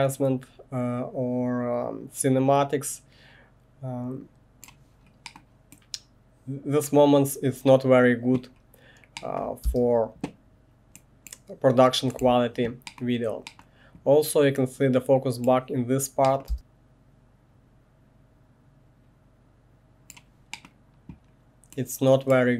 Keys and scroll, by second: 9.6 space, 12.2 1, 16.5 space.